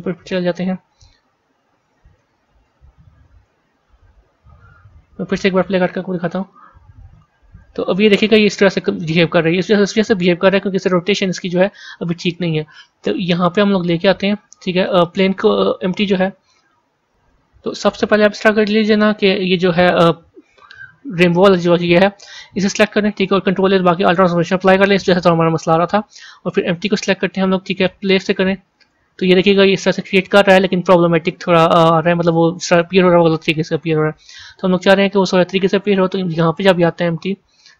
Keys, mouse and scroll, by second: 1.0 z, 2.1 z, 3.2 a, 3.9 z, 5.5-13.8 drag, 15.3-17.0 drag, 21.9 a, 22.7 click, 24.0 ctrl+a, 26.8 click, 28.0 click, 32.6-36.8 drag.